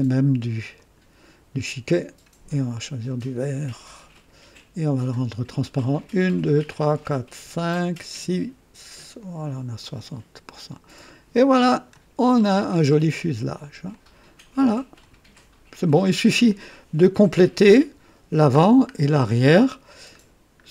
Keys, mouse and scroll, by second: 0.7 click, 3.0 click, 4.1 click, 5.9 click, 6.5 click, 8.0 click, 9.1 click, 9.8 click, 10.5-11.9 drag, 12.2-12.5 scroll up 2, 13.1 right click, 13.9-14.9 drag, 16.0-16.4 scroll up 2, 16.5 right click, 18.5-18.9 scroll down 1, 19.0-20.0 right drag, 20.1 scroll down 1.